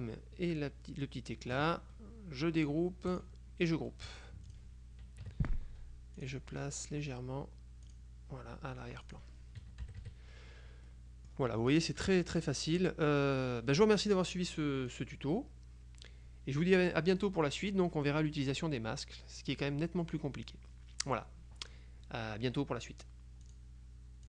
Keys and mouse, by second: 3.2 click, 4.2 click, 5.4 KP_Subtract, 6.3 click, 8.0 click, 9.2 click, 9.9 KP_Subtract, 11.0 click, 11.2 middle click, 11.8 click, 15.0 click, 23.6 click.